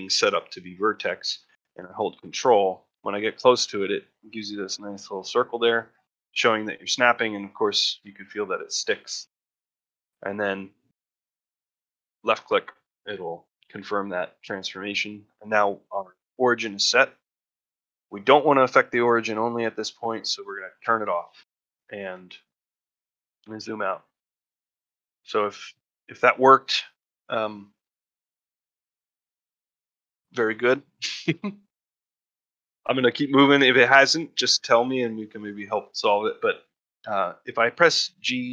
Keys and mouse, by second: 13.9-14.5 middle drag, 18.2-20.9 drag, 22.1 ctrl+middle drag, 22.5 ctrl+middle drag, 22.9 ctrl+middle drag, 23.3 ctrl+middle drag, 24.0-24.4 shift+middle drag, 24.5 ctrl+middle drag, 24.8 shift+middle drag, 25.2-25.5 middle drag, 25.6 shift+middle drag, 26.0 middle drag, 26.3 shift+middle drag, 32.6 shift+middle drag, 33.4-33.7 shift+middle drag, 35.3 shift+middle drag, 35.7-36.2 shift+middle drag.